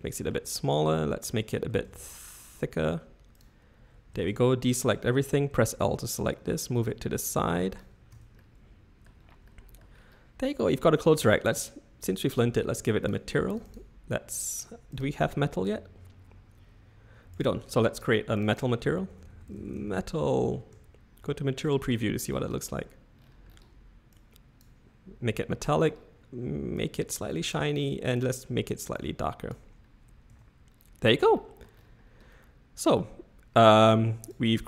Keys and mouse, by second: 1.7 s, 4.1 a, 4.3 a, 5.5 l, 6.8-7.8 drag, 8.2 Tab, 8.3 middle click, 9.4 middle click, 13.0 click, 13.5 click, 13.6 click, 14.9-17.4 drag, 18.0 drag, 18.3 click, 18.5-20.4 drag, 20.7 z, 21.9-22.3 shift+middle drag, 24.2 click, 26.9 click, 30.3 Tab, 31.3 middle click, 32.3-33.8 middle drag.